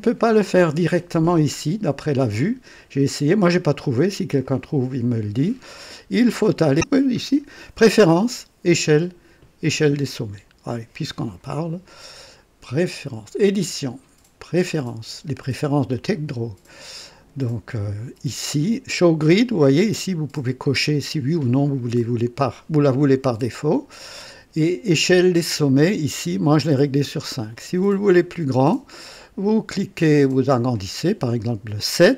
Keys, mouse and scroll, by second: 4.4 click, 5.0 click, 11.1 click, 13.4 click, 14.5 click, 15.9 click, 24.2 click, 30.3 click, 30.8 click.